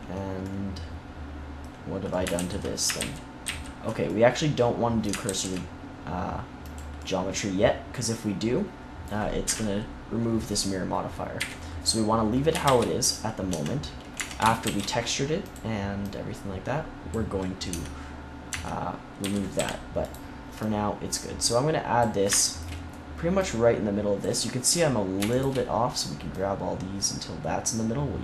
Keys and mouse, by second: 2.3 ctrl+z, 2.9 ctrl+z, 3.4 ctrl+z, 5.2 ctrl+s, 9.4 KP_3, 11.3 KP_1, 12.6 shift+s, 13.4 Tab, 14.1 Tab, 14.6 shift+a, 17.6 Tab, 18.4 Tab, 19.1 z, 19.5 g, 23.3 click, 24.1 right click.